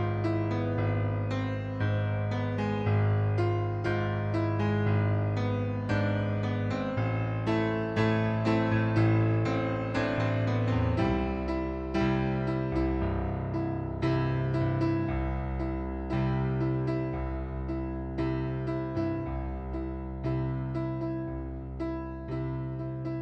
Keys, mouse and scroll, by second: 0.2 right click, 1.4 click, 3.5 middle click, 4.4 click, 5.4 middle click, 6.5 ctrl+d, 7.1 click, 9.2 right click, 10.1 shift+click, 10.4 middle click, 11.2 ctrl+d, 12.0 click, 14.9 click, 15.2 right click, 16.6 middle click, 17.5 click, 18.7 click, 19.1 right click, 20.7 click, 22.0 right click, 23.0 shift+click.